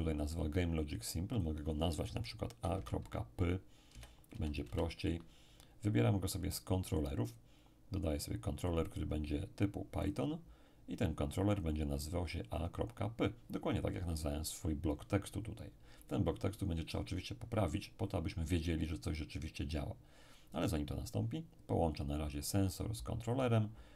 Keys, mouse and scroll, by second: 1.3 click, 2.6 a, 2.7 ., 3.9 p, 4.3 y, 4.6 Return, 7.2 click, 10.0 click, 11.5-13.6 drag, 22.0-23.9 drag.